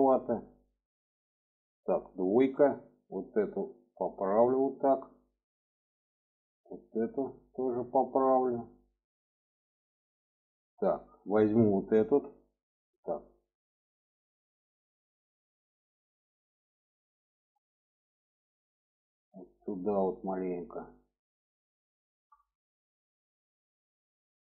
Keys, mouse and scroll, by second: 2.2 2, 2.7 click, 3.6-4.8 drag, 6.1 click, 7.1-9.0 drag, 9.8 shift+middle click, 11.4 alt+shift+click, 12.6 click, 13.6 alt+shift+click, 15.2-19.7 drag, 21.8 shift+middle click, 22.3 middle click, 23.5 alt+middle click.